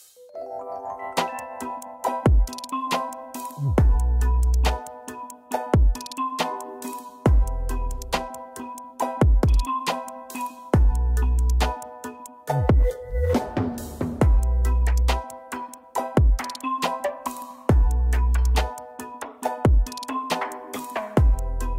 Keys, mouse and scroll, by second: 0.4 ctrl+z, 1.3 double click, 2.0 ctrl+g, 4.3 Up, 4.6 Down, 4.7 Down, 4.9 Down, 5.1 Down, 6.4 F4, 7.0 typing, 8.2 ctrl+space, 9.4 double click, 12.8 double click, 20.9 typing.